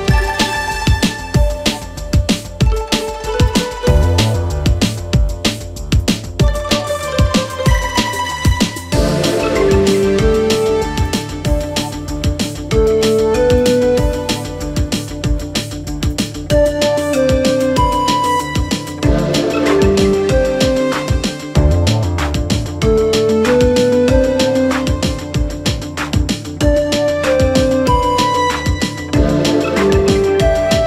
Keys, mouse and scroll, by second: 0.6 click, 1.3 click, 2.4 click, 3.1 click, 4.2 click, 4.8 click, 5.6-6.7 scroll down 2, 6.7 click, 7.3 click, 8.0-8.4 scroll down 1, 8.4 KP_3, 9.4-10.0 scroll up 2, 10.0 click, 11.0 click, 12.9 click, 13.9 click, 14.5 shift+click, 15.3 f, 16.0-17.6 right drag, 17.6 click, 18.4 ctrl+KP_1, 20.4 click, 22.5 KP_3, 23.3 2, 24.1 click, 25.1 f, 25.6 f, 26.6 click, 27.3-28.5 shift+middle drag, 28.5 ctrl+f.